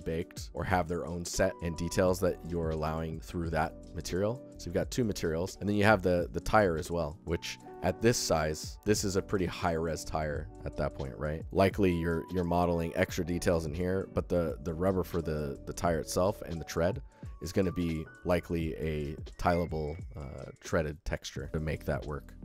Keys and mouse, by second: 0.0-0.5 alt+shift+middle drag, 2.0 alt+shift+middle drag, 4.2 click, 5.1 alt+shift+middle click, 6.9 alt+shift+middle click, 7.3 ctrl+alt+middle click, 7.5 alt+middle click, 9.1 alt+shift+click, 11.4 ctrl+alt+click, 14.8 alt+click, 17.1 alt+shift+drag, 17.3 ctrl+alt+click, 17.5 ctrl+alt+click, 17.8 alt+shift+click, 20.0-20.5 alt+shift+middle drag, 20.7-21.1 alt+middle drag, 21.1 ctrl+alt+middle drag, 21.4 alt+shift+middle click.